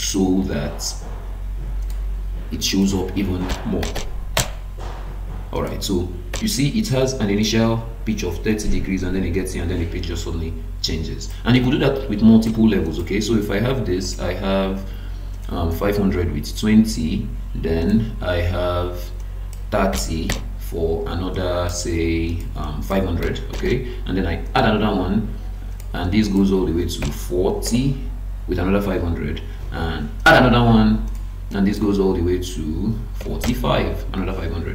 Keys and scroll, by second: 4.4 Return, 11.6 Escape.